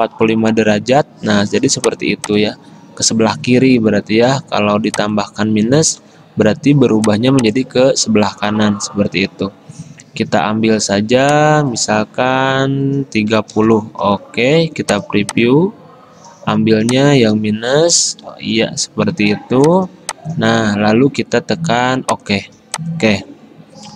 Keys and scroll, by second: 0.0-0.8 typing, 6.1 -, 13.1-14.1 typing, 18.3 -.